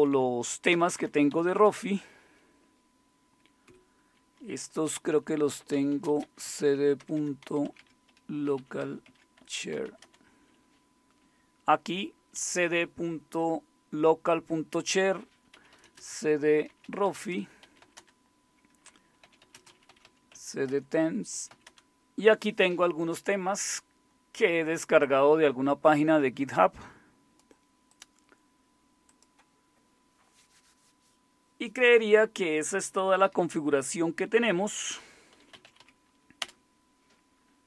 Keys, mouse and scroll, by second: 0.1 Up, 0.7 Down, 1.3 Up, 1.5 Up, 3.6 Escape, 5.5-10.2 typing, 9.0 Tab, 9.4 Return, 15.3-22.0 typing, 35.1-36.6 typing, 36.4 Return.